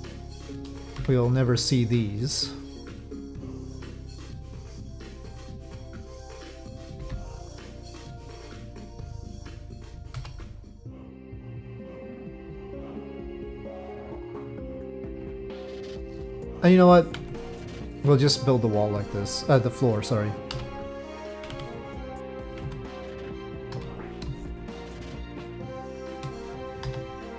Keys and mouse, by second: 0.9 c, 4.5 middle click, 6.3 middle click, 7.0 c, 8.5-9.6 middle drag, 10.8 Delete, 11.2-13.1 middle drag, 13.5 middle click, 14.7-16.2 middle drag, 17.2 Tab, 17.6 click, 18.0 middle click, 20.5 Delete, 21.5 Tab, 22.6 Tab, 23.7 1, 24.5 shift+click, 25.0 shift+click, 25.7 shift+click.